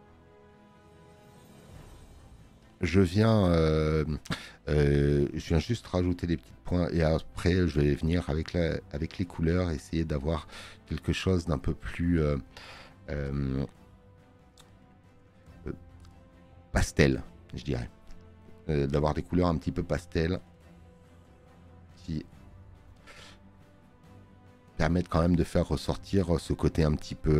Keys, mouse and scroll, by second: 10.8 space, 11.0 click, 17.1 space, 17.1 click, 24.5 space, 24.6 click.